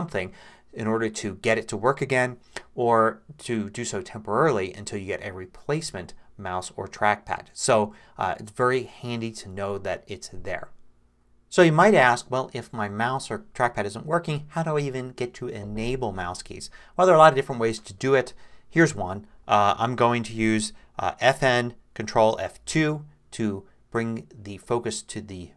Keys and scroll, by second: 22.6 ctrl+F2.